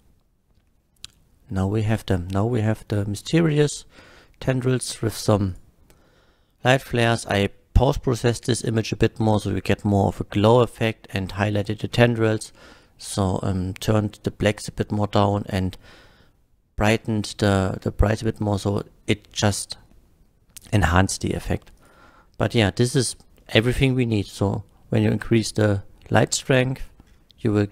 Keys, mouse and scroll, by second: 5.5 click, 20.6 typing, 21.8 click, 22.9 click, 27.1-27.7 middle drag.